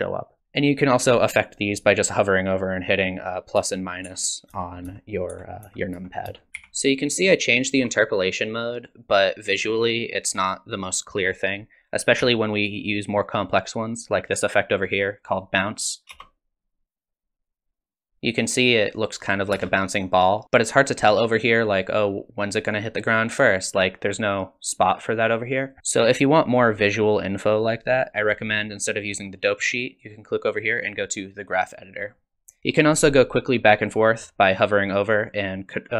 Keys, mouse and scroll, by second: 0.4 click, 3.6 KP_Add, 4.1 KP_Subtract, 4.5 KP_Add, 4.9 KP_Add, 5.3 KP_Subtract, 5.7 KP_Add, 6.0 KP_Add, 6.3 KP_Add, 6.5 click, 6.6 t, 8.5 click, 12.2 t, 16.0 click, 16.1 space, 19.5 space, 20.1 click, 21.1 click, 23.4 click, 24.8 click, 29.5 click, 31.9 click.